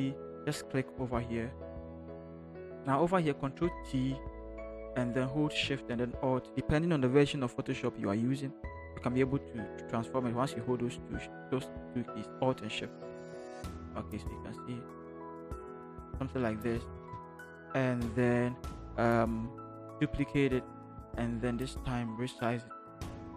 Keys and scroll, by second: 3.9 ctrl+t, 16.9 alt+shift+Return, 20.5 ctrl+j, 21.3 ctrl+t.